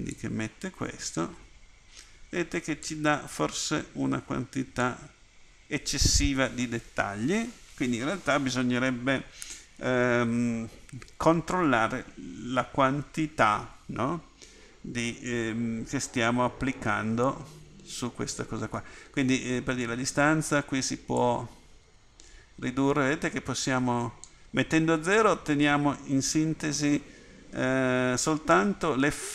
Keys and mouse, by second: 3.0-5.1 drag.